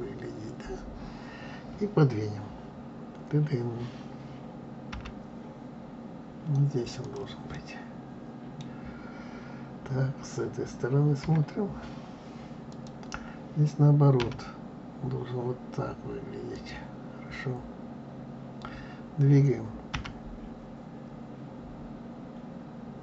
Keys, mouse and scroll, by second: 4.9 g, 7.5-10.5 middle drag, 11.2 KP_1, 12.6 click, 14.1 r, 19.9 g.